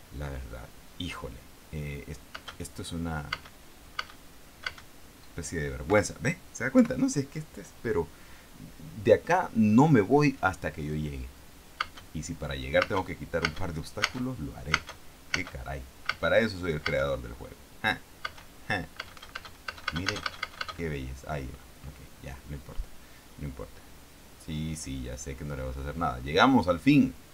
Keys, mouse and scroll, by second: 2.7 space, 3.7 space, 4.3 space, 5.0 space, 6.2 Escape, 7.1 p, 12.1 space, 13.2 space, 15.1 space, 16.5 space, 17.2 space, 18.6 space, 19.3 space.